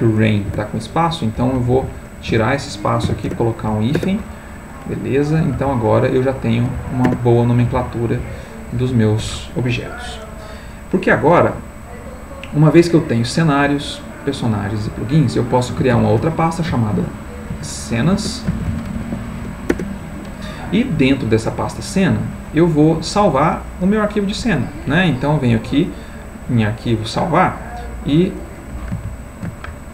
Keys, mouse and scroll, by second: 0.5 F2, 1.4 Right, 1.5 Left, 2.3 BackSpace, 3.0 -, 3.3 Return, 3.9 Return, 5.5 alt+Left, 6.7 alt+Down, 7.0 alt+Return, 7.7 alt+Left, 13.3 click, 14.3 click, 14.8 click, 15.9 ctrl+shift+n, 17.5-19.0 typing, 19.7 Return, 24.1 click, 25.4 click, 27.4 click.